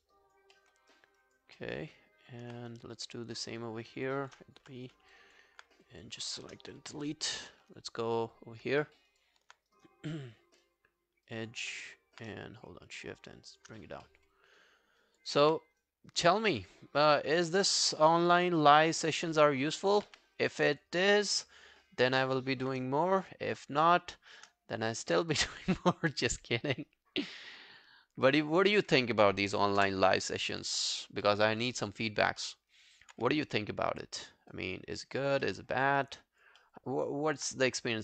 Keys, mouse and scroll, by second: 0.1 alt+click, 0.6 alt+middle click, 0.9 alt+scroll up 1, 1.2 alt+click, 1.6 alt+middle click, 2.0-2.6 alt+scroll up 1, 2.7 right click, 3.9 scroll down 1, 4.1 alt+click, 4.7 b, 5.0 scroll down 1, 5.2 alt+click, 6.7 Delete, 8.8 alt+middle click, 9.1 alt+right click, 9.7 right click, 11.4 double click, 11.6 w, 11.9 scroll up 3, 12.7 shift+click, 13.8 scroll up 1, 14.1 alt+middle click, 14.4 alt+scroll up 1, 14.7 alt+scroll down 1, 15.0 alt+click, 15.4 w, 15.8 right click, 16.8-17.2 scroll up 9, 17.8 right click, 19.2 double click, 19.5 scroll down 2, 19.8 alt+click, 20.1 q, 20.4 scroll down 2, 20.7 alt+click, 21.1 alt+middle click, 21.5-21.9 alt+scroll down 2, 22.4 alt+middle click, 22.6 alt+scroll down 1, 23.0 shift+right click, 24.9 alt+middle click, 25.2 alt+right click, 29.8 Return, 31.3 alt+middle click, 31.6 alt+scroll down 1, 31.9 alt+click, 32.4 alt+middle click, 32.7 alt+right click, 33.2 w, 33.5 right click, 35.5 alt+middle click, 35.9 alt+scroll down 1, 36.1 alt+click, 36.6 alt+middle click, 37.1 alt+scroll down 1, 37.1 alt+click.